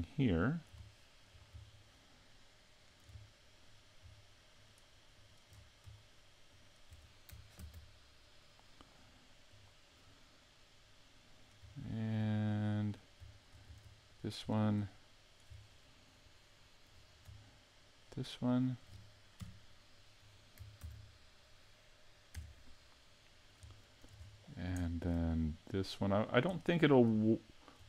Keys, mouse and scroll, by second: 0.0 middle click, 0.8 shift+middle click, 2.3 middle click, 3.2 middle click, 4.5 shift+right click, 5.1 shift+right click, 5.5 scroll up 4, 6.5 shift+right click, 7.6 ctrl+e, 11.7 shift+middle click, 12.3 middle click, 14.1 right click, 14.4-14.9 scroll down 3, 14.9 middle click, 16.3 shift+middle click, 18.4 shift+right click, 19.4 KP_Decimal, 20.8 ctrl+e, 21.9 shift+right click, 22.9 middle click, 23.8 shift+middle click, 24.2-24.8 scroll up 4, 24.8 shift+middle click, 25.8 right click, 26.5 middle click, 27.2 shift+middle click.